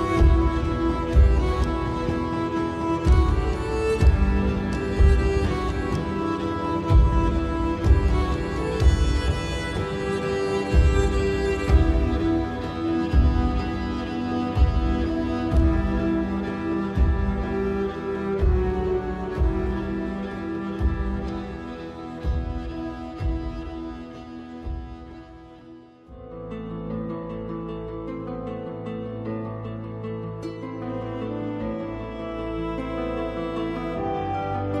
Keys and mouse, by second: 11.2 middle click, 12.6 KP_7, 14.5 click, 17.0 click, 18.1 middle click, 19.5 shift+click, 21.3 KP_7, 23.6 i, 29.1 ctrl+z, 30.8 i.